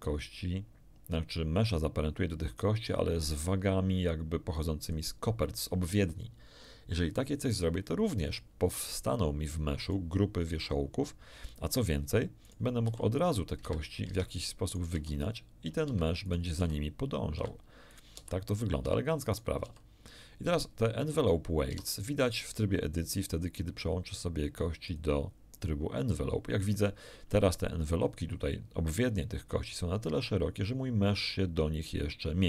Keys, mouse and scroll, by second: 4.8 click, 9.8 right click, 12.4 right click, 12.8 r, 13.5 Escape, 14.0 ctrl+Tab, 14.6 ctrl+right click, 14.9 r, 16.1 Escape, 16.2 right click, 16.5 r, 17.3 Escape, 17.9 right click, 18.1 r, 18.8 Escape, 19.3 right click, 19.6 r, 20.4 Escape, 21.7 Tab, 24.8 click, 26.7-27.3 scroll up 1.